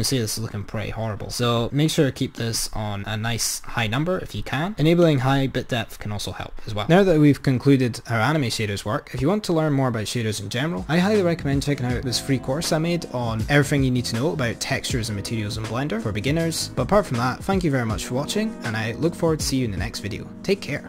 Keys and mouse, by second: 1.4-4.1 drag, 5.3 click.